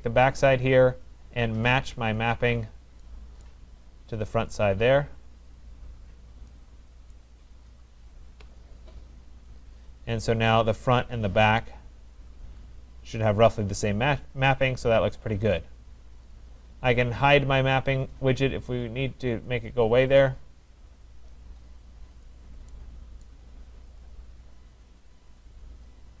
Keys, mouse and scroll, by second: 2.3 click, 3.4 right click, 4.5 click, 7.1 right click, 8.3 Return, 9.6-10.2 scroll, 11.1 middle click, 15.3 right click, 16.3 click, 19.0 click, 21.4 click, 22.4 click, 23.3 right click, 24.1 click, 25.7 click.